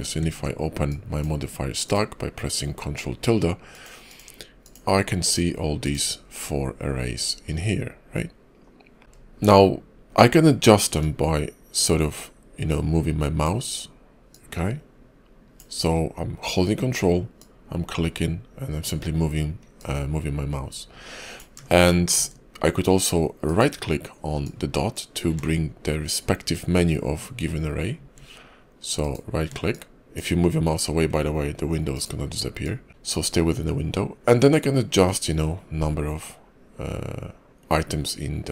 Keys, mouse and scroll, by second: 0.1 ctrl+`, 9.0 middle click, 9.0-10.1 scroll down 2, 10.9 ctrl+click, 14.2 ctrl+click, 19.6 ctrl+click, 21.7 middle click, 23.3 ctrl+right click, 28.9 ctrl+right click, 31.8 ctrl+right click.